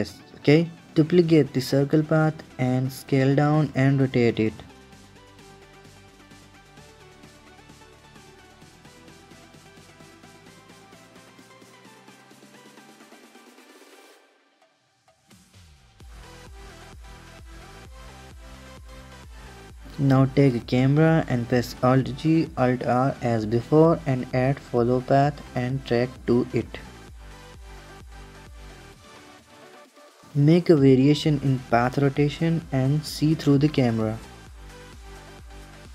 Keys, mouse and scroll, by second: 1.4 click, 1.9 shift+d, 2.8 s, 7.3 s, 7.7-8.0 middle drag, 8.0-8.5 scroll down 5, 8.5 click, 8.9 h, 9.1-9.6 middle drag, 9.6 click, 10.1 r, 11.7 click, 12.4 r, 13.4 r, 14.2 r, 15.9-17.4 middle drag, 18.4 shift+a, 18.5 click, 18.9 h, 19.1 click, 19.3 shift+a, 20.3-20.8 middle drag, 20.8 alt+g, 21.2 alt+r, 21.5-23.0 middle drag, 24.5 click, 24.9-27.5 drag, 27.7-29.9 drag, 30.2 r, 30.8 KP_0, 31.1 r, 32.1-33.1 drag, 33.1 r, 34.4-35.5 drag, 35.7 r.